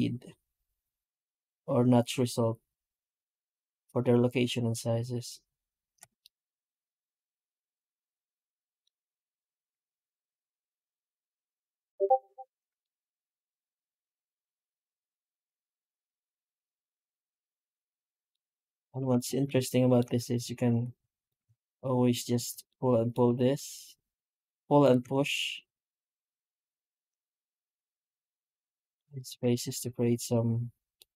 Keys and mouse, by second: 6.1-7.1 middle drag, 7.2 middle click, 7.4 middle click, 8.3-8.7 middle drag, 8.8 F9, 12.7-13.3 middle drag, 13.4 middle click, 13.8-18.1 middle drag, 18.1 middle click, 18.6 right click, 18.9 Tab, 19.4-19.8 shift+middle drag, 20.2 3, 21.0 right click, 22.1 ctrl+right click, 22.5-22.9 middle drag, 22.9 alt+middle click, 23.4 alt+s, 24.9 Tab, 25.2-28.3 middle drag, 28.7 middle click, 28.8 middle click, 29.0 right click, 29.2 Tab, 30.8 middle click.